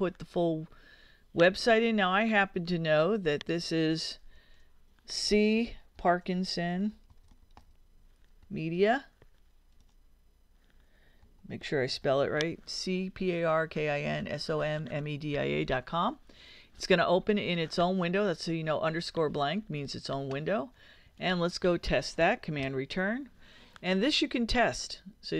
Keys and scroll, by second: 3.3-8.7 typing, 10.2 d, 10.4 i, 11.0 a, 21.6 super+Return.